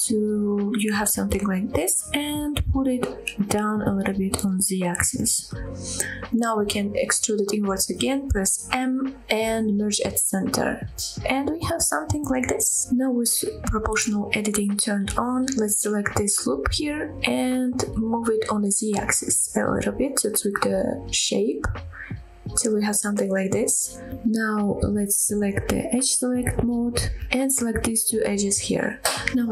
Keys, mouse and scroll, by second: 0.8 g, 1.2 z, 3.3 click, 3.7-4.0 scroll down 1, 4.0 middle click, 4.6-5.7 scroll up 3, 5.1 middle click, 5.9 e, 6.3 s, 7.2 click, 7.9 m, 9.1-9.6 scroll down 2, 9.6 middle click, 10.3 middle click, 10.9-11.2 scroll down 2, 11.2 middle click, 11.8-13.8 middle drag, 13.9 right click, 13.9 scroll down 7, 13.9 click, 14.1 click, 14.5-14.8 scroll up 2, 14.8 middle click, 15.2 g, 15.7 z, 16.6-19.1 scroll up 4, 19.1 click, 19.4-19.7 scroll down 1, 19.7 middle click, 20.4-20.8 scroll down 2, 20.8 middle click, 21.4 scroll down 1, 21.8 shift+middle click, 22.1 middle click, 23.8 click, 24.2 middle click, 25.9 click, 27.2 click, 27.9 shift+click, 28.5 middle click.